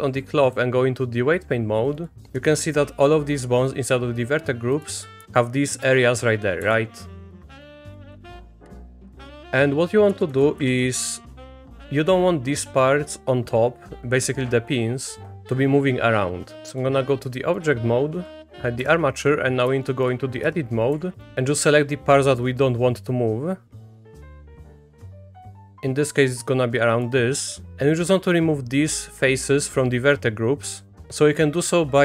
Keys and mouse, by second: 0.5-3.7 drag, 5.2 Down, 5.6 middle click, 6.6 Down, 7.3 click, 7.4-8.3 Down, 8.6-9.1 Down, 9.2 Down, 9.3 Down, 9.4 Down, 10.1 Down, 10.3 Down, 10.6 Up, 16.6 Tab, 16.6 click, 16.6 3, 18.8 h, 19.9 shift+click, 20.4 Tab, 20.9 3, 21.2 click, 21.3 c.